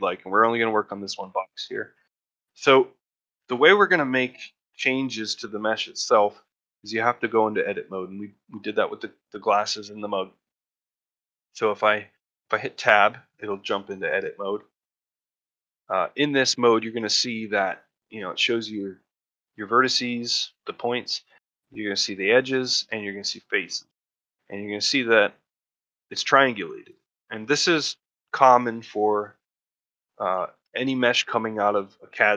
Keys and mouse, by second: 0.7 middle drag, 1.1-1.6 shift+middle drag, 1.8 shift+middle drag, 2.1 middle drag, 2.5-2.9 shift+middle drag, 3.0-4.2 ctrl+shift+middle drag, 6.2-6.5 middle drag, 6.5 shift+middle drag, 6.8-7.1 middle drag, 7.3 shift+middle drag, 7.6 middle click, 7.9-8.3 shift+middle drag, 12.6 Tab, 15.3 shift+middle click, 16.0 middle click, 16.7 middle click, 17.2 ctrl+middle click, 17.5 shift+middle click, 17.8 middle click, 18.3 shift+middle click, 23.8 middle click, 24.5 shift+middle click, 24.9 middle click, 26.0 middle click, 26.6 middle click, 27.1 middle click, 27.5 middle click, 28.2 middle click, 28.5 middle click, 29.1 middle click, 29.7 middle click, 30.3 shift+middle click, 30.7 ctrl+middle click, 31.0 shift+middle click, 31.4 middle click, 31.9 shift+middle click, 32.2 middle click.